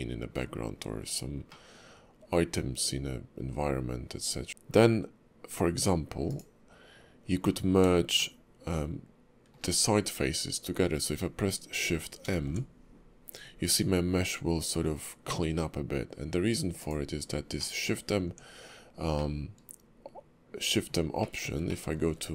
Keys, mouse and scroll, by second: 0.6-1.5 scroll up 8, 1.5 middle click, 4.5 q, 8.7 shift+middle click, 17.6 middle click, 18.2 Tab, 19.2 middle click, 21.2 shift+middle click, 21.7 middle click.